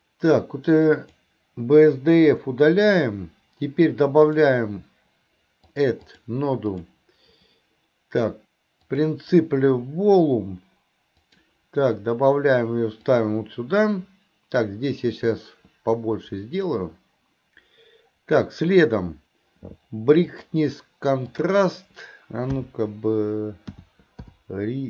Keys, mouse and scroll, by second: 6.0 click.